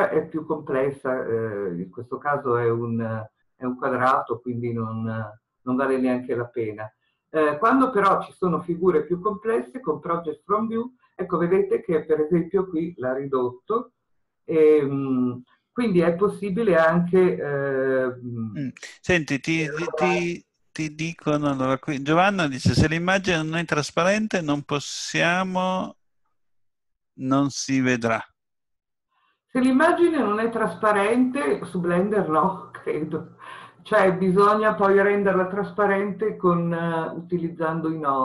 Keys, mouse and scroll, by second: 21.6-28.1 middle drag, 21.6 s, 28.1 click, 31.5-38.2 middle drag.